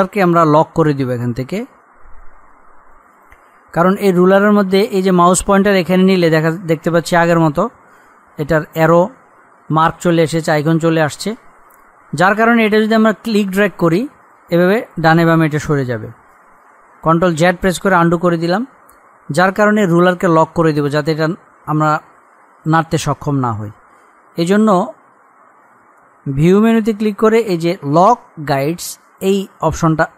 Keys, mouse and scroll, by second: 3.1 click, 16.7 ctrl+Num_Lock, 17.2 ctrl+z, 26.3 click, 29.1-30.1 drag.